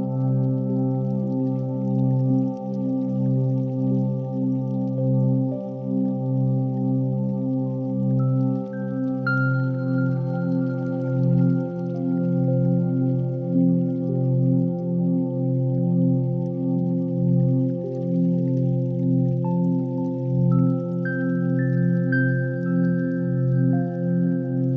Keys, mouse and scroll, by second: 0.0-1.5 typing, 0.2 click, 1.2 click, 2.5 click, 2.7 g, 2.9 x, 4.9 shift+click, 5.7 click, 7.2 click, 7.9 shift+click, 8.5 shift+drag, 9.2-10.7 typing, 12.3 click, 13.0 click, 13.7 shift+click, 14.2 g, 14.6 y, 16.2 g, 16.6 Escape, 17.3 g, 17.7 y, 18.1 y, 20.0 click, 20.6 click, 22.9 z.